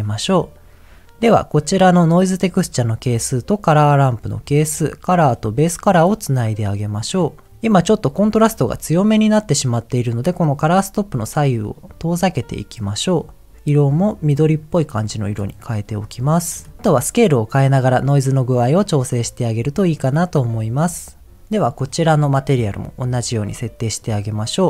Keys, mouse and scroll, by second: 0.0-1.1 drag, 2.6-3.7 drag, 5.1 click, 6.5 click, 10.6 click, 11.7-12.8 drag, 13.6 click, 15.2 click, 15.8 click, 16.5 click, 16.7-18.7 drag, 19.5 click, 20.3 click, 21.4 click.